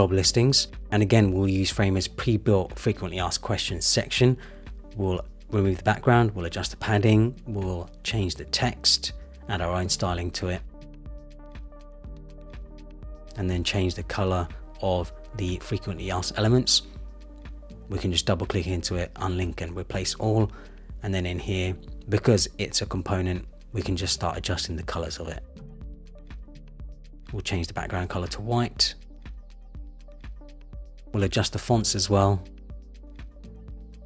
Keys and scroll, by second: 9.2 Return, 27.3 Return.